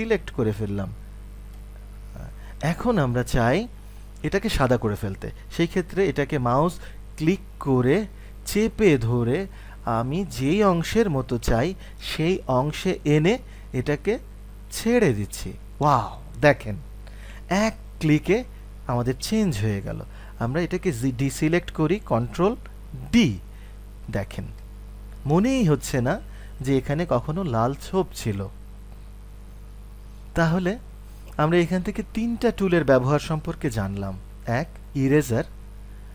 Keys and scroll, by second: 23.0 ctrl+d.